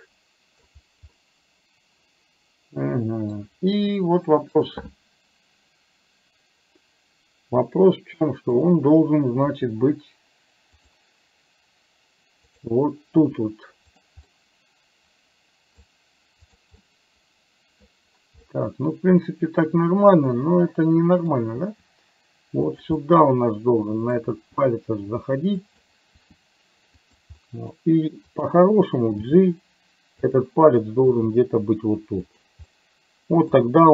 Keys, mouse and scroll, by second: 1.2-3.4 middle drag, 3.8 r, 8.5 click, 9.5 r, 12.5 click, 13.2 r, 14.3-15.9 middle drag, 16.5 click, 16.8-17.8 middle drag, 18.5-21.3 middle drag, 21.7 r, 23.0-24.2 middle drag, 24.4 r, 26.2 r, 27.5 middle click, 29.2 g, 31.2 g, 32.8 middle click.